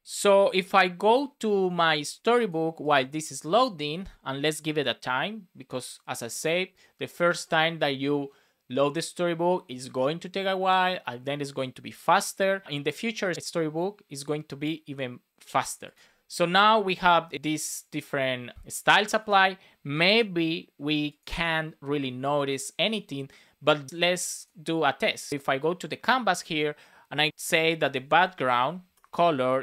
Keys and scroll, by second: 27.3 Return, 28.9 Return.